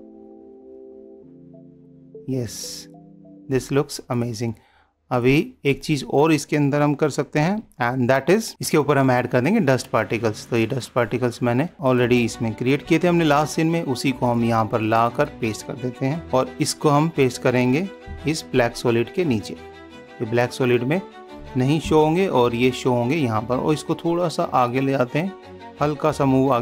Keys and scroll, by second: 7.7 ctrl+s, 13.3 ctrl+c, 16.5 ctrl+v, 22.2 super+-.